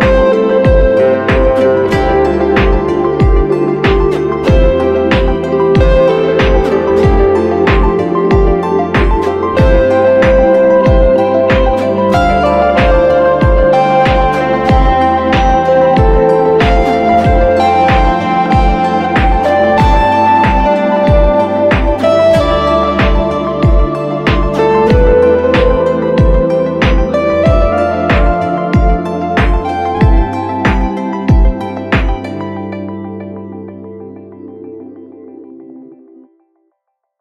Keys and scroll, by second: 1.5 super+-, 12.5 super+t, 31.3 BackSpace, 35.8 BackSpace, 36.9 super+d.